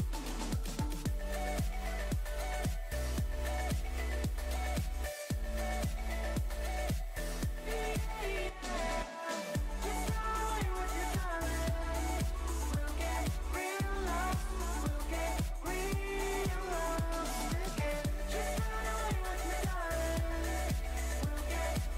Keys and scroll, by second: 1.8 3, 3.2 0, 7.5 space.